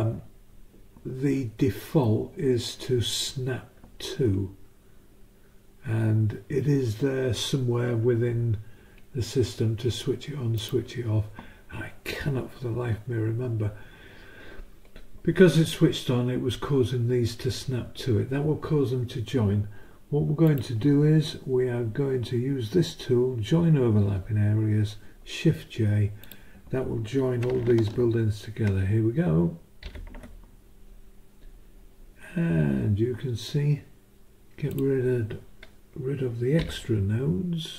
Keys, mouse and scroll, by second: 10.6 click, 20.4 click, 26.2 click, 29.8 shift+j, 34.7 click, 36.6 Delete.